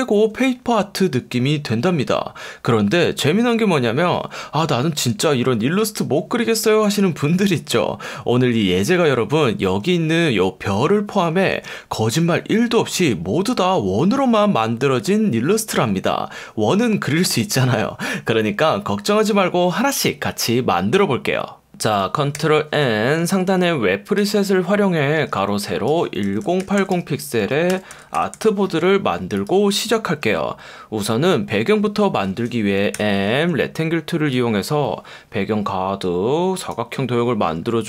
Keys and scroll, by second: 22.4 super+n, 23.5 F1, 25.2 F1, 26.0-28.8 typing, 32.9 m.